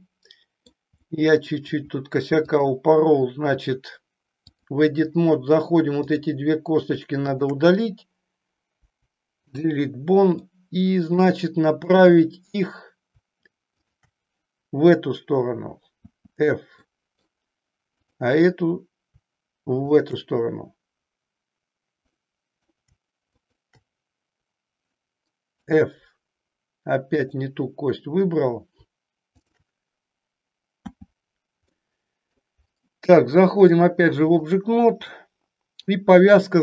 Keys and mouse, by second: 0.2 middle click, 1.0 middle click, 2.5-4.7 drag, 6.0 click, 7.3 shift+click, 8.7 Delete, 10.4 middle click, 11.8 click, 15.9 f, 16.8 middle click, 17.9 click, 19.8 shift+click, 22.2 middle click, 23.3 shift+click, 25.5 f, 27.2 click, 29.3 shift+click, 30.9 f, 31.8 middle click, 33.7 click, 35.2 middle click.